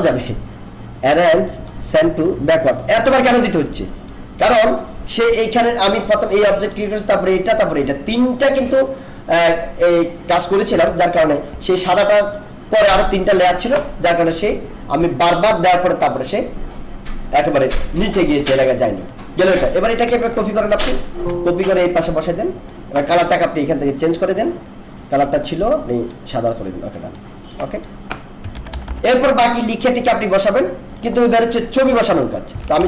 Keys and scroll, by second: 10.8 ctrl+-, 20.9 alt+space, 28.5 ctrl+-, 32.6 ctrl+=.